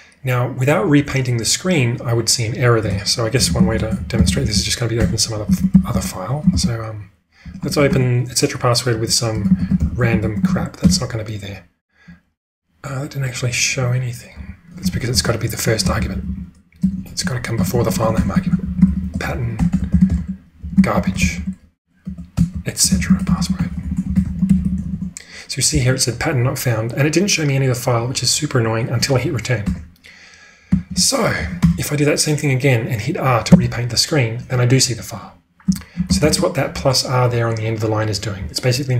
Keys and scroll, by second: 3.2-5.9 typing, 6.5 ctrl+e, 7.4 BackSpace, 7.5 BackSpace, 7.7 BackSpace, 9.1-11.3 typing, 14.3 q, 15.1 Up, 15.9 ctrl+w, 17.5-19.1 typing, 29.7 Return, 30.6 q, 31.3 Page_Up, 31.6 Return, 33.4 r, 35.6 q, 36.1 ctrl+space.